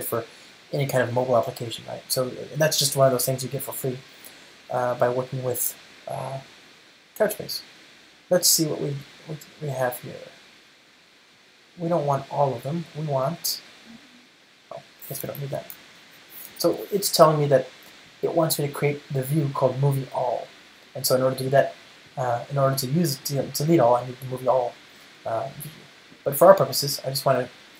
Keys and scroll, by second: 25.2 super+r.